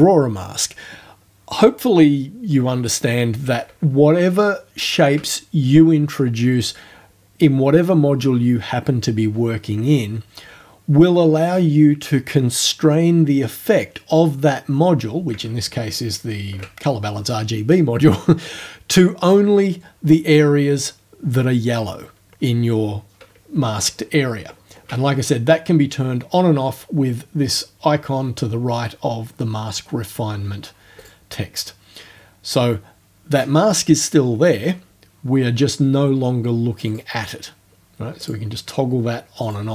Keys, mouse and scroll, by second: 4.3-4.8 ctrl+alt+scroll up 2, 15.7-16.2 ctrl+alt+scroll up 2, 23.7-24.2 ctrl+alt+scroll down 2, 24.4 ctrl+alt+scroll down 2, 31.0 click, 36.9 click, 38.3 click, 39.5 click.